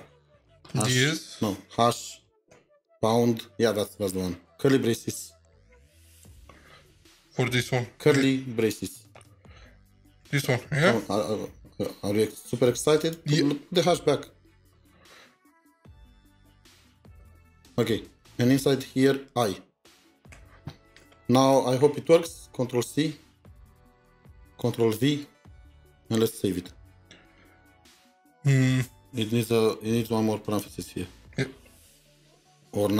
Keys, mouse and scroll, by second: 0.0 BackSpace, 1.6 f, 6.1 #, 7.0 |, 9.2 BackSpace, 10.6-11.4 typing, 16.3 typing, 17.0 Return, 20.3 typing, 21.5 typing, 25.6 typing, 29.2 typing, 29.6 Left, 29.6 Left, 29.7 Left, 29.9 Left, 30.1 Left, 30.6 Right, 32.0 typing.